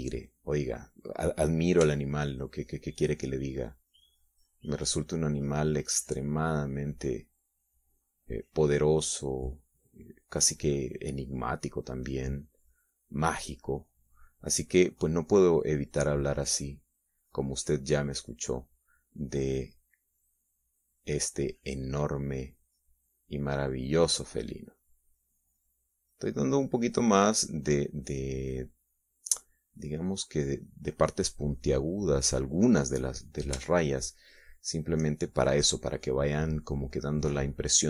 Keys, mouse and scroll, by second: 0.4-2.0 drag, 3.4 f, 3.8 click, 4.4-10.7 drag, 11.2-13.8 drag, 14.1-15.9 drag, 16.2-18.4 drag, 18.8-20.5 drag, 20.8-22.6 drag, 23.1-25.7 drag, 26.0-29.3 drag, 29.7 click, 30.6 middle click, 31.4-34.2 drag, 34.3 middle click, 35.3 shift+middle click, 35.7-37.1 shift+scroll up 1.